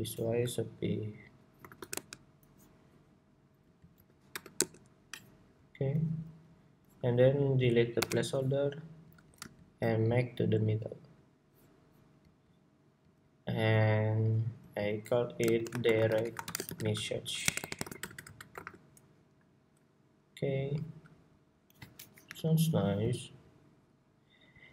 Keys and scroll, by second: 19.0 Escape.